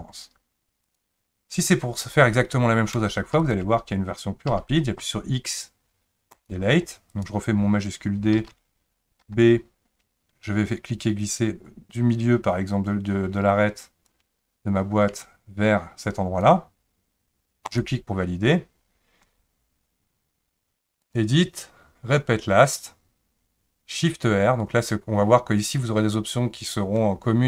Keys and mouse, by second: 3.4 shift+click, 4.5 x, 8.3 shift+d, 21.0-25.9 drag.